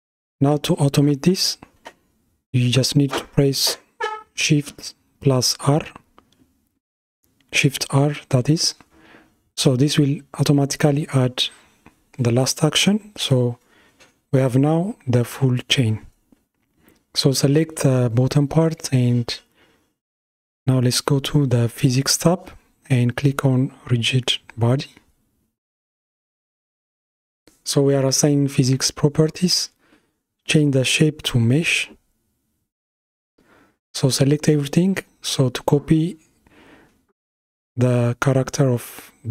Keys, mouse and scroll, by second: 0.7-1.0 scroll down 4, 1.8-4.7 shift+middle drag, 4.7 shift+r, 6.1 shift+r, 8.7 shift+r, 11.3 click, 15.4 click, 21.5 click, 26.3-32.5 drag, 33.0 a, 35.5 F3.